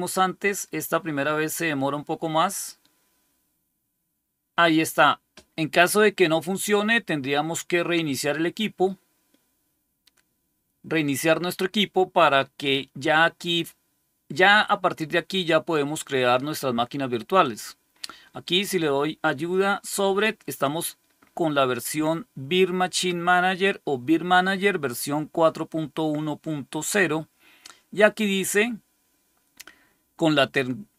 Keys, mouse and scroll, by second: 17.3 click, 18.4 click.